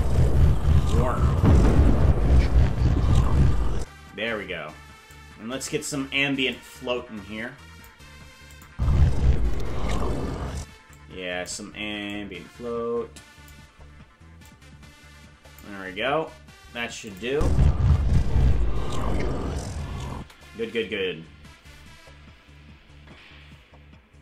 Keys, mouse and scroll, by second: 3.8 space, 5.1 click, 6.5-7.9 drag, 8.5 click, 8.7 space, 10.9 click, 12.1-13.5 drag, 14.4-15.6 drag, 17.1 click, 17.3 space, 20.2 space.